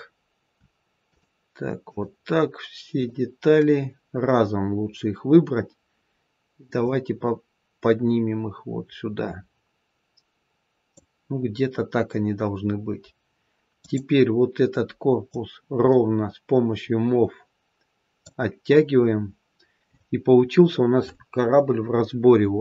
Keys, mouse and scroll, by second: 1.0 shift+click, 1.8 shift+click, 2.9 shift+click, 6.7 click, 13.7 click, 15.2 click, 19.0-21.7 scroll up 1, 21.7-22.1 scroll down 1.